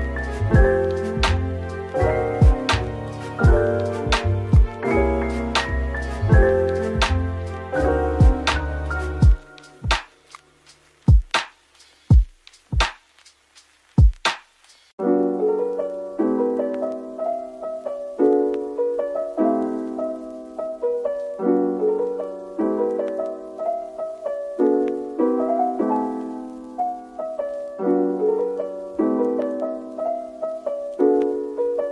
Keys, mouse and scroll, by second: 1.2-1.6 scroll down 2, 2.7 double click, 26.6-27.0 scroll down 2, 30.5 shift+click, 31.5 ctrl+l.